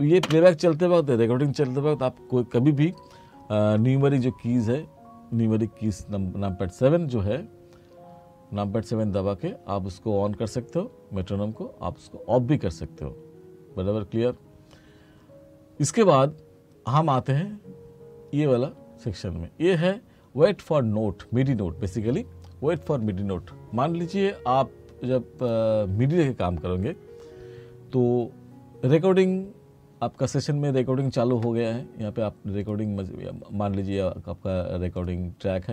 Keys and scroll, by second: 0.4 space.